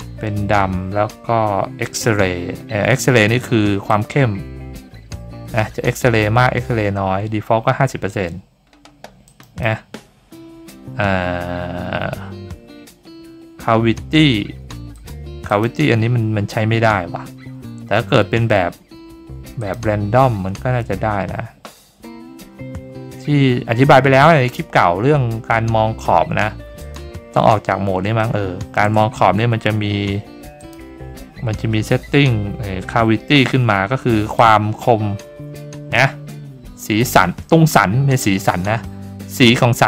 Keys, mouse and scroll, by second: 3.9-9.6 drag, 9.2 middle click, 9.2 right click, 14.9 click, 15.4 click, 19.6 click, 24.1 middle click, 24.1-25.5 scroll up 5, 24.4 middle click, 25.7-26.0 scroll down 3, 25.7 middle click, 26.8 click, 27.5 middle click, 27.5 scroll up 3, 28.1-28.7 shift+middle drag, 30.6 click, 34.3-39.8 drag.